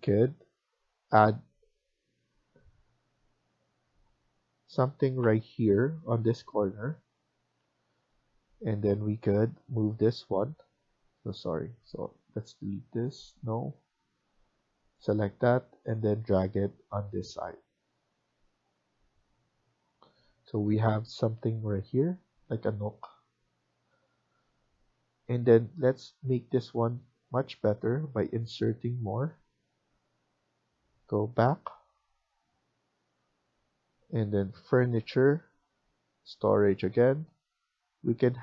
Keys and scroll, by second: 22.4 Escape.